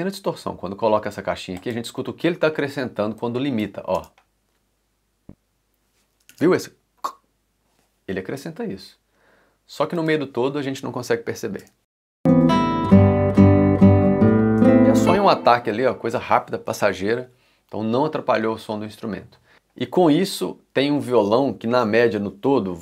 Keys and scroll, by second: 4.0 space, 11.6 space, 14.5 space.